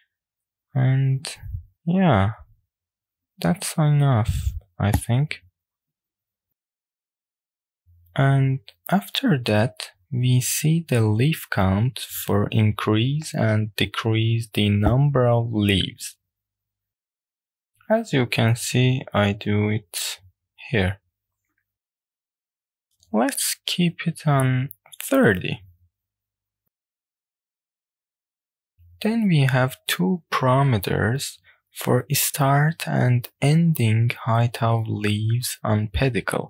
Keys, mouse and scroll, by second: 11.4-14.3 middle drag, 14.9-16.8 middle drag, 16.9-22.6 drag, 22.6-23.1 shift+middle drag, 22.6-23.1 scroll up 1, 23.5-23.8 scroll up 1, 24.7-27.0 drag, 33.8-34.7 scroll down 1, 34.7 click, 35.6 click.